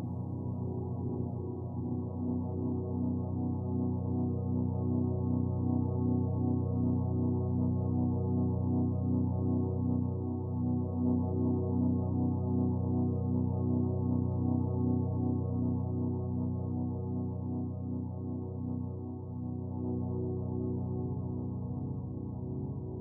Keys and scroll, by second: 3.4 ctrl+t, 9.3 Return.